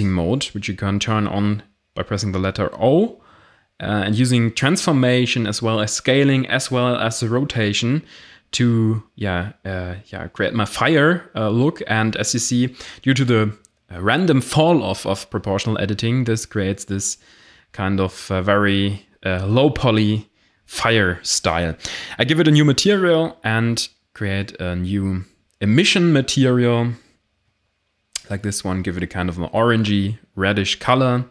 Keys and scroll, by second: 2.6 s, 7.5 g, 13.2 g, 14.3 Tab, 14.7 a, 17.3 r, 17.9 a, 21.4 f, 21.5 i, 21.5 r, 21.7 e, 21.8 Return.